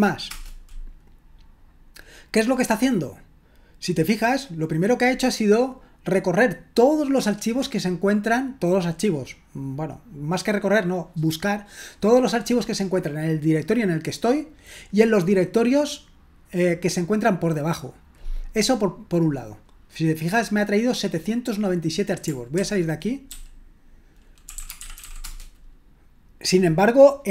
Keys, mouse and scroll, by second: 22.6-25.5 typing.